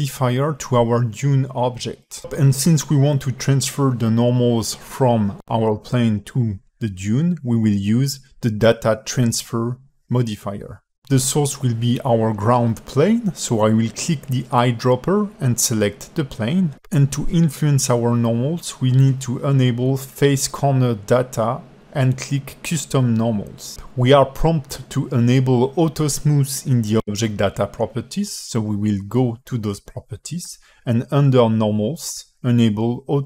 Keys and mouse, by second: 15.4 click, 18.9 click, 19.5 click, 21.3 click, 30.5 click, 31.5 click, 32.2-33.2 alt+middle drag.